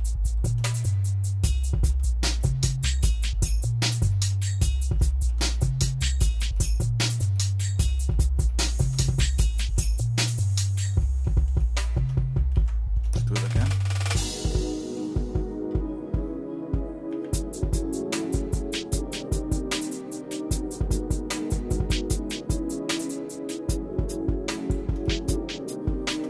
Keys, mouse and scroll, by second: 0.2 scroll down 1, 0.3 scroll up 1, 0.5 scroll down 1, 0.7-1.9 shift+middle drag, 2.5-3.9 shift+middle drag, 4.1 middle click, 4.6 scroll down 1, 5.1 shift+middle click, 5.6 shift+middle click, 6.0 middle click, 6.6 shift+middle click, 7.4 middle click, 7.9 middle click, 8.5 shift+middle click, 9.0 middle click, 9.8-10.8 shift+middle drag, 11.0 middle click, 11.6 shift+middle click, 12.5 ctrl+z, 13.2 shift+middle click, 13.8 middle click, 14.4 shift+middle click, 17.1 e, 25.1-26.2 shift+middle drag.